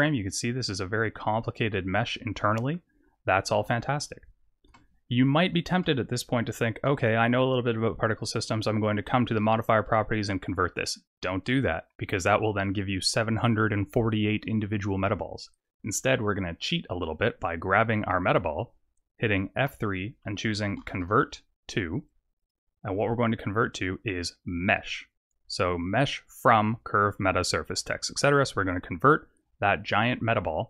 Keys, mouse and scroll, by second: 0.2 scroll up 4, 0.7 middle click, 2.9-3.2 scroll down 4, 4.7 Tab, 5.9 Tab, 6.4 z, 7.7 click, 9.2 click, 14.4 click, 17.7 click, 19.6 F3.